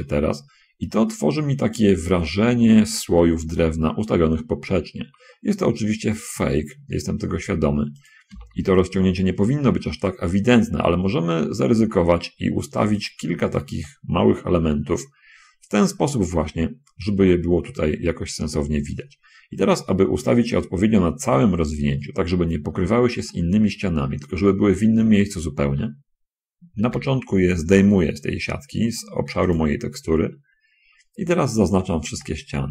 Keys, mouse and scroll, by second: 0.0 shift+middle click, 2.5-3.7 middle drag, 5.8 s, 8.3 click, 8.6 s, 8.8 x, 13.3 click, 13.5 middle click, 14.1-15.1 shift+drag, 19.4-19.9 scroll up 1, 20.6 shift+middle click, 23.0-23.3 scroll up 1, 23.6 middle click, 24.2 click, 25.1 click, 26.1 click, 26.8 g, 29.8 click, 31.9 a, 32.4 a.